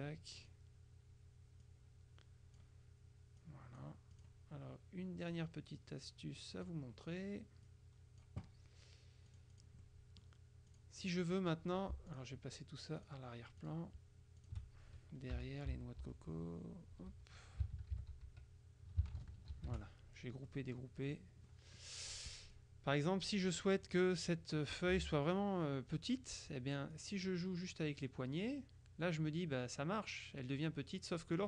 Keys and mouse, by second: 0.5 click, 1.7 click, 3.5 click, 5.4-7.3 drag, 7.8 click, 9.4 click, 11.2 click, 12.2 shift+click, 13.1 click, 14.5 click, 15.5 Page_Down, 17.2 Page_Up, 18.0 ctrl+g, 18.3 ctrl+Page_Down, 19.6 ctrl+shift+g, 20.5-21.7 drag, 22.5 click, 23.5 click, 27.0-31.4 drag.